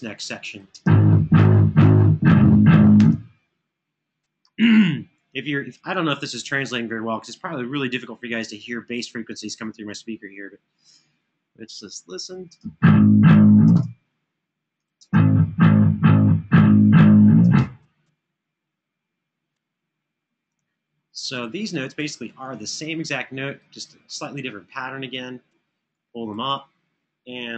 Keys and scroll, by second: 0.5 space, 12.3 space, 14.7 space, 17.2 space, 24.3 Home.